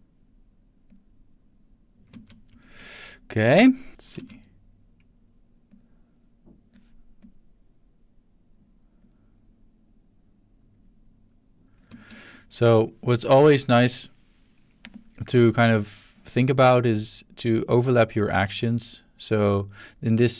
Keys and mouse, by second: 0.9 click, 2.1 space, 2.6-3.9 ctrl+shift+middle drag, 3.9 drag, 4.1 space, 5.7 click, 7.2 click, 9.0 click, 10.7 click, 11.9 space, 12.8-13.2 drag, 16.1-20.3 drag.